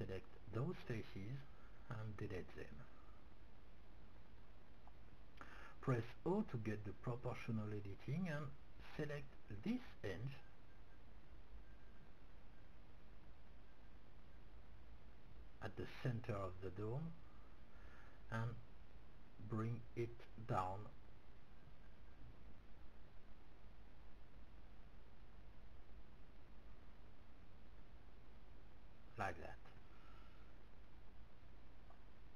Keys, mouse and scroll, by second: 1.6 x, 4.6 middle click, 5.7-7.4 middle drag, 8.3-11.1 middle drag, 10.4 c, 12.0-14.5 middle drag, 14.5 o, 15.1-18.2 middle drag, 19.1-21.4 drag, 30.3-32.3 middle drag.